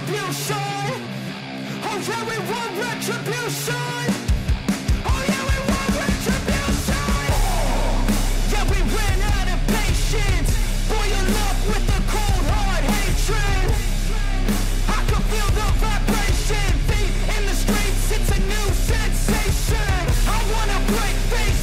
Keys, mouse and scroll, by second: 3.3 click, 9.2 right click, 11.9 right click, 13.1-19.7 drag.